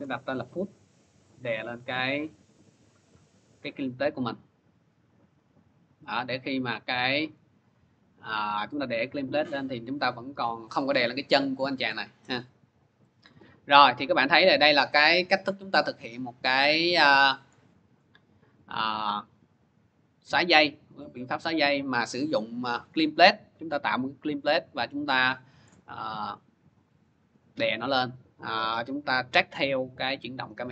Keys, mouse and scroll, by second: 1.7 click, 2.5-2.9 scroll, 2.9 middle click, 3.6 middle click, 8.5 click, 10.4 click, 12.1-12.6 scroll, 13.1 scroll, 14.3 click, 15.7 middle click, 25.5-30.5 drag, 26.0-30.7 middle drag.